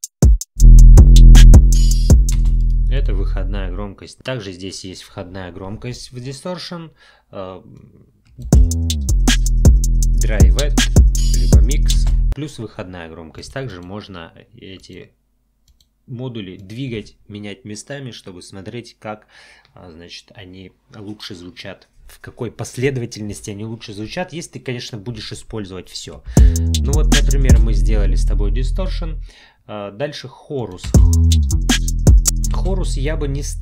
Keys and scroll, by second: 2.4 space, 8.4 space, 12.0 space, 26.3 space, 30.8 space, 32.5 space.